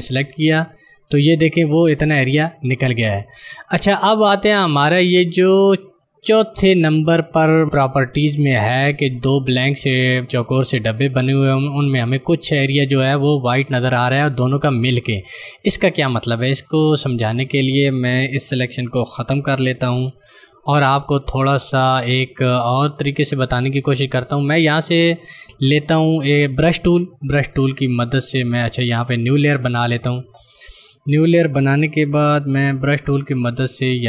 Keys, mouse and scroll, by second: 19.8 ctrl+d, 27.5 click, 29.1 click.